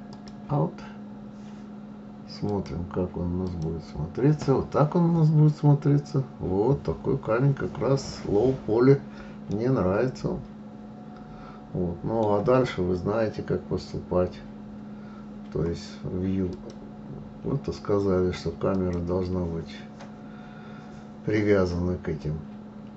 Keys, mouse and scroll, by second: 0.0 click, 2.5-3.6 drag, 5.7-6.8 scroll up 3, 6.8-8.2 scroll down 1, 9.5-18.6 middle drag, 18.6 click.